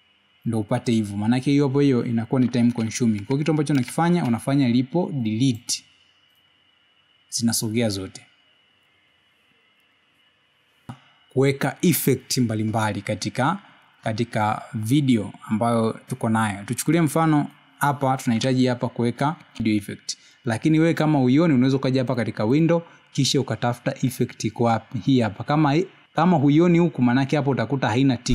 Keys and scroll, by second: 5.8 ctrl+z.